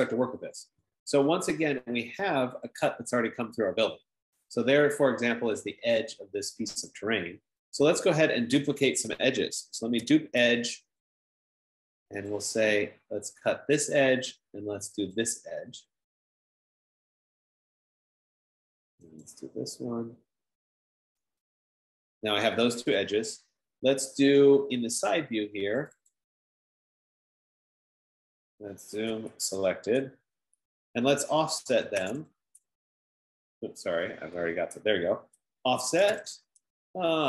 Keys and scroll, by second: 9.7-10.9 typing, 11.1 Return, 15.7 F15, 15.7 typing, 21.6 Return, 29.7-30.3 typing, 31.8-33.1 typing, 34.1 Return, 35.8-37.2 typing.